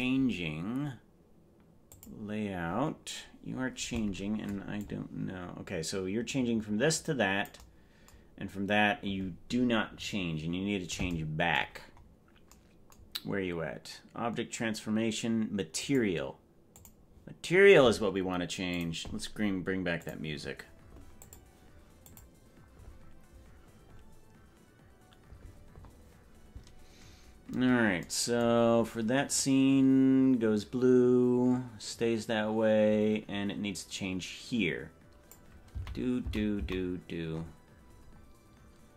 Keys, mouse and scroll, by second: 2.0 click, 4.9-7.7 drag, 12.0-12.4 scroll up 6, 15.7 click, 16.7 click, 27.0-27.4 scroll up 3, 29.5-35.6 drag, 35.8 Right, 36.4 Right, 36.8 Right, 37.3-37.7 scroll up 5, 37.9-38.3 scroll down 4.